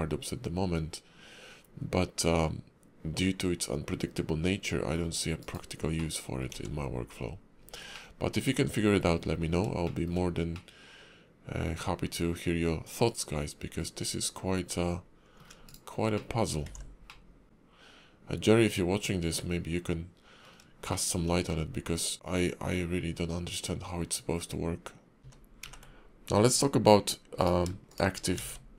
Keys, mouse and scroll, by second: 6.0 middle click, 6.5 `, 7.5-7.9 scroll down 3, 7.9 middle click, 8.9 KP_5, 9.3-9.7 scroll up 3, 9.8 shift+middle click, 10.5 middle click, 15.6 shift+right click, 16.1 middle click, 16.6 alt+x, 17.0 middle click, 20.9 shift+middle click, 21.5 middle click.